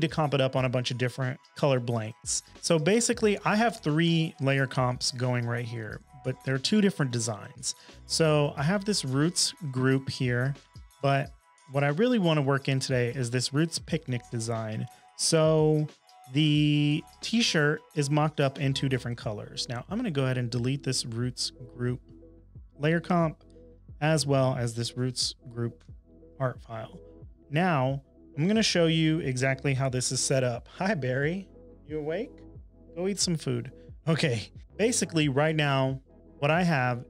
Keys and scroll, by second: 25.7 BackSpace.